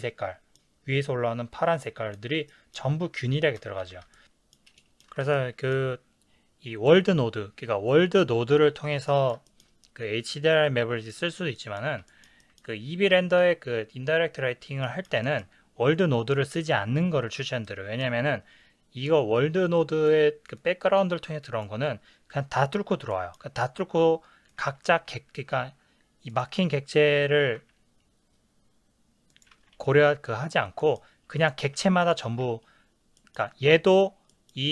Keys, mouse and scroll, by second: 3.9 ctrl+s, 4.1 shift+middle click, 7.8-10.5 middle drag, 10.5 click, 11.6-19.4 middle drag, 19.4 click, 20.6 click, 21.4 click, 23.1-24.6 middle drag, 24.6 click, 27.6 g, 29.4 click, 29.5 ctrl+z, 30.8-31.4 middle drag, 31.4 click, 31.7 g, 32.1 click, 32.3 ctrl+z, 33.2-34.7 middle drag.